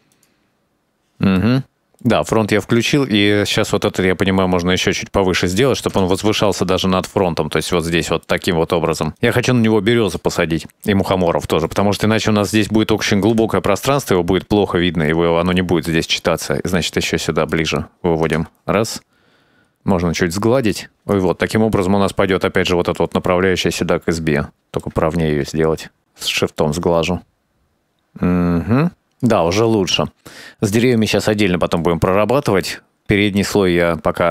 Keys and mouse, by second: 0.1 click, 0.3 middle click, 0.9 KP_0, 1.3-1.7 drag, 1.8 middle click, 2.9-5.5 drag, 6.1 KP_0, 7.6 middle click, 8.5-9.6 drag, 10.3 shift+middle click, 10.4 shift+click, 10.6 shift+middle click, 11.0 middle click, 13.4 KP_0, 15.2 middle click, 16.3-17.7 drag, 18.4 KP_0, 19.3 shift+middle click, 19.7 middle click, 20.4 shift+click, 20.8 shift+click, 23.6-25.2 middle drag, 25.7 shift+click, 26.3 middle click, 27.1 KP_0, 27.9-29.9 drag, 31.4 shift+middle click.